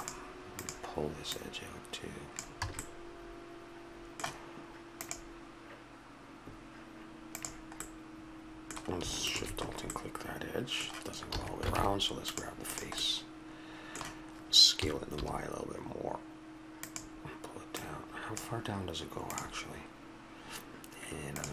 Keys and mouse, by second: 2.6 a, 3.1-5.0 middle drag, 7.8-9.2 middle drag, 9.2 right click, 9.9-11.3 middle drag, 11.3 a, 11.7 ctrl+Tab, 12.7 click, 13.0 middle click, 13.8 click, 14.8 s, 17.7-19.4 drag.